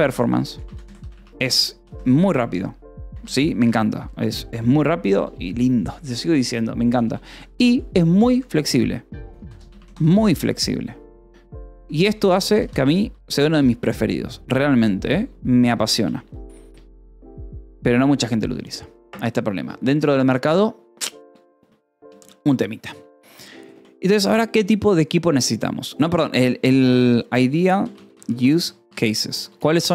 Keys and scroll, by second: 0.0-4.6 typing, 3.3 Escape, 6.9-8.2 typing, 9.3 l, 9.6 Escape, 10.2 k, 10.9 j, 12.6 j, 13.4 Escape, 15.0 o, 15.4 Return, 15.9 BackSpace, 22.3 space, 22.9 BackSpace, 23.9 3, 24.1 space, 25.9-29.8 typing, 29.4 Escape.